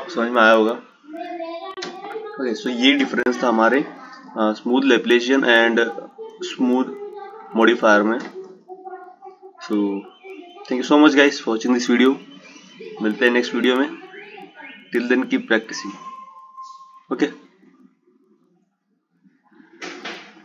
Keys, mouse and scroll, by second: 3.8-5.8 drag.